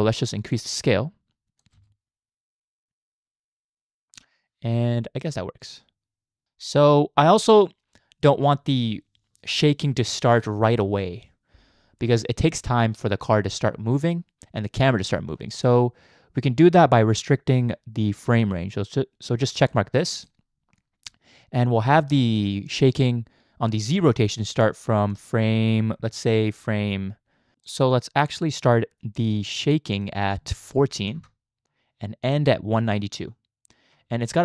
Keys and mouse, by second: 0.5-1.6 drag, 1.8 space, 6.4 click, 6.4 space, 19.6 click, 25.2-27.6 drag, 29.9-31.2 drag, 32.4 click.